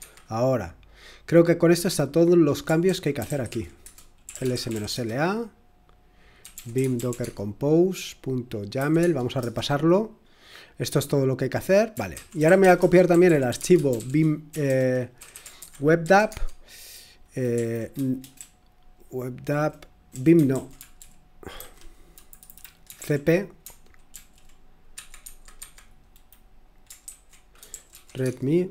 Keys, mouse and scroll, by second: 2.6-7.7 typing, 8.7-9.3 typing, 11.8-24.1 typing, 24.9 Escape, 25.2 Escape, 25.5 Escape, 27.4-28.7 typing.